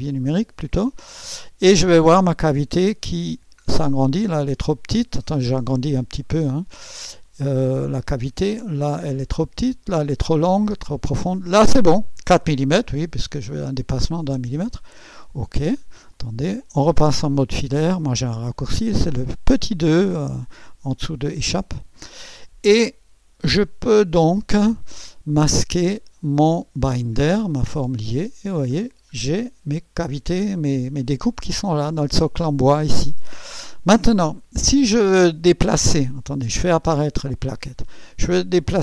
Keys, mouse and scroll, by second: 0.0 scroll up 2, 2.3-2.7 scroll down 2, 3.0 scroll down 2, 4.0-4.8 scroll up 4, 5.3-5.7 scroll up 2, 5.9 right click, 8.3-8.7 scroll down 1, 9.2-10.0 scroll up 2, 10.0 typing, 10.5-10.9 scroll down 2, 14.7 click, 15.4-15.7 scroll down 2, 16.1 click, 21.4 click, 21.4 2, 23.6 right click, 25.8 click, 25.8 typing, 27.8 typing, 28.8-29.1 scroll down 1, 29.4-32.3 drag, 32.9 typing, 36.2 click, 36.9 space.